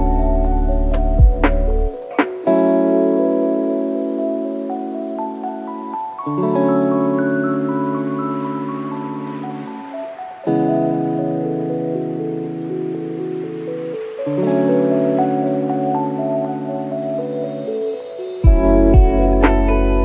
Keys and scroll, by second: 6.3 alt+space, 8.7-9.8 typing.